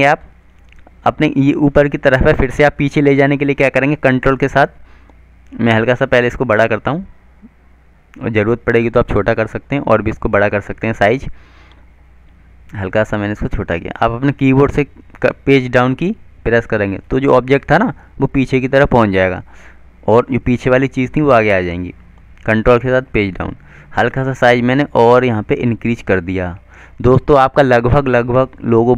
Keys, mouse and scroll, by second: 6.1 shift+click, 14.3 ctrl+Page_Down, 18.1 ctrl+Page_Down, 24.4 shift+click, 27.6 click.